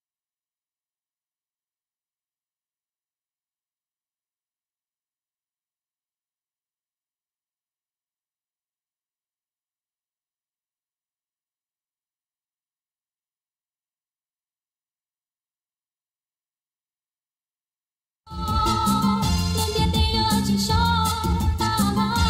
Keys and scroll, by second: 10.0 space, 12.0 space, 18.3 space.